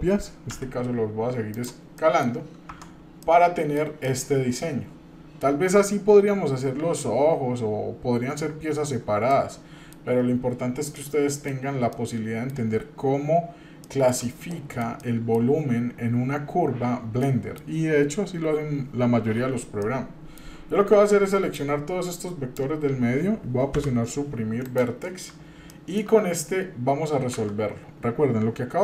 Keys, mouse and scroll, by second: 2.0 middle click, 2.7 Tab, 3.2-3.8 middle drag, 4.1-5.4 middle drag, 9.3-9.9 middle drag, 10.1-10.9 scroll up 1, 10.9-11.5 middle drag, 11.6 scroll down 1, 11.9-12.5 middle drag, 13.8 shift+middle click, 14.5 middle click, 15.0-15.4 shift+middle drag, 17.2 middle click, 19.3 Tab, 19.8 middle click, 21.5-22.5 drag, 23.7 Delete, 25.7 shift+middle click, 28.7 Tab.